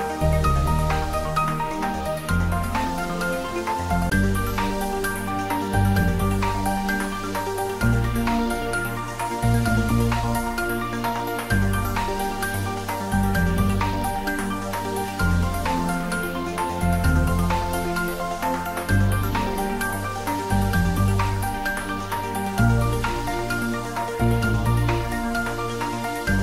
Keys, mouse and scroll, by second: 1.9-3.4 typing, 4.5 click, 5.2 Tab, 7.1-7.5 scroll up 1, 9.7-10.2 scroll down 1, 10.2-10.8 middle click, 11.0-11.8 scroll up 1, 11.8 Tab, 12.9 click, 13.6 Tab, 15.0 ctrl+r, 16.2 click, 21.2 click, 21.8 scroll up 1, 22.4 Tab, 23.8 click, 26.3 3.